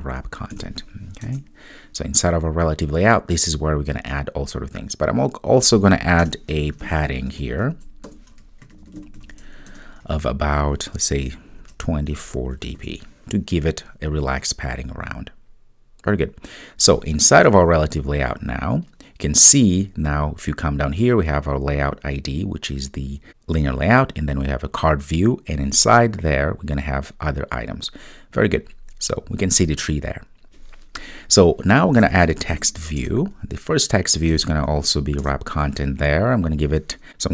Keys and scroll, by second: 9.8 Return, 33.1 Return.